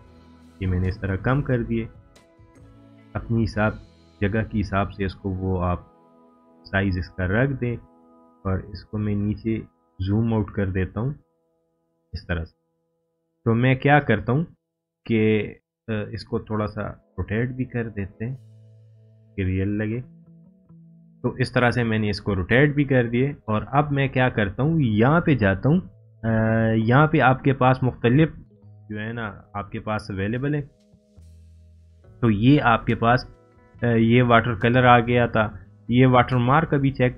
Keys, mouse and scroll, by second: 10.0 scroll up 1, 10.9 scroll down 1, 12.0-12.9 drag.